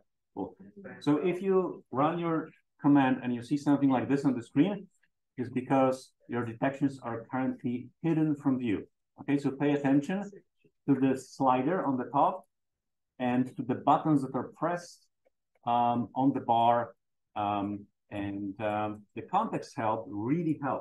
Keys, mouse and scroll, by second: 1.8-2.1 drag, 2.2-3.6 scroll down 1, 3.6 click, 9.8 click, 10.9 click.